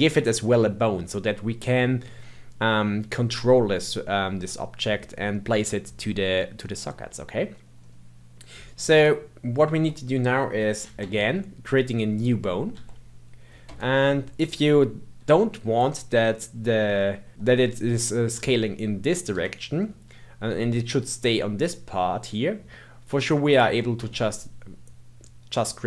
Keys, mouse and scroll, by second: 7.8-8.2 scroll up 2, 8.2 scroll down 2, 8.9 click, 10.8 shift+a, 12.1 click, 12.7 s, 15.2 s, 18.3 s, 23.4 click, 23.9 g.